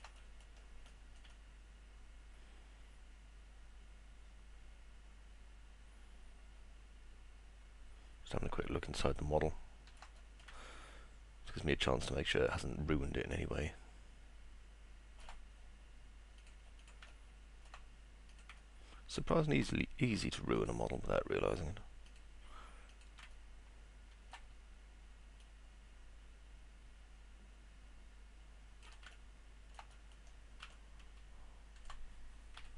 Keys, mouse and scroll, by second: 0.3 middle click, 0.9 middle click, 1.3-9.9 alt+middle drag, 10.2 middle click, 10.5-15.2 alt+middle drag, 18.3 click, 18.7 alt+middle click, 22.9 ctrl+click, 23.3-24.3 alt+middle drag, 25.4-28.8 shift+drag, 29.2-29.7 alt+middle drag, 29.9 middle click, 30.7-31.8 alt+middle drag.